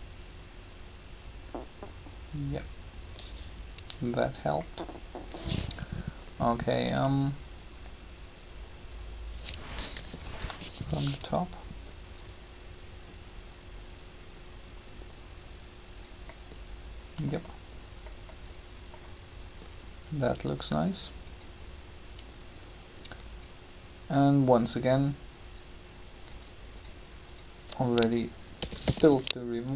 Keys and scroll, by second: 9.8 7, 28.5-29.7 typing.